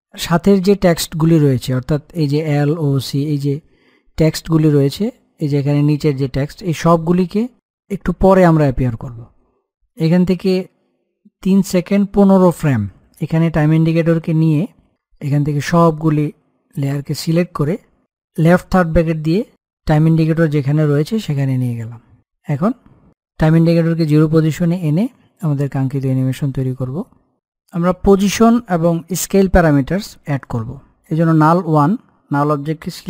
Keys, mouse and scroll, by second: 0.0 click, 7.5-15.2 drag, 15.9-16.9 scroll down 1, 17.1 shift+click, 18.9 [, 19.9-21.3 scroll up 1, 21.9-24.5 drag, 24.5-26.3 scroll down 1, 29.7 click.